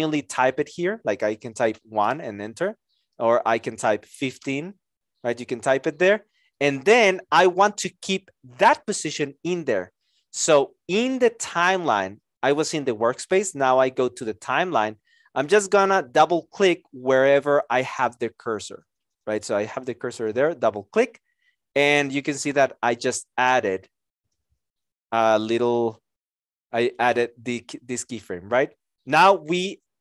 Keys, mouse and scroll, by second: 1.7 KP_1, 2.0 Return, 4.1 KP_1, 4.1 KP_5, 4.3 Return.